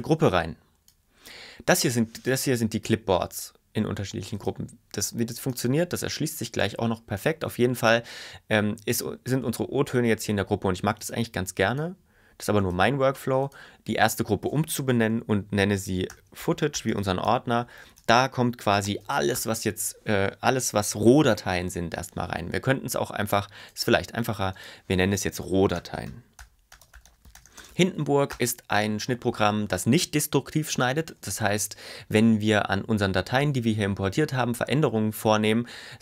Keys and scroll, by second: 16.0-19.5 typing, 25.9-28.1 typing, 28.4 Return.